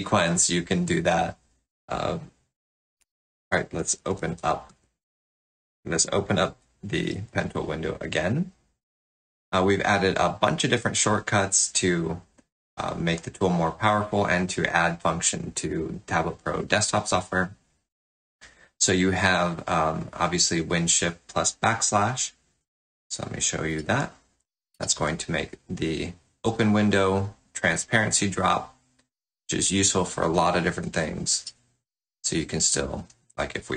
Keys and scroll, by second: 3.0 alt+Tab, 7.1 ctrl+\, 23.8 shift+super+\, 31.4 shift+super+\.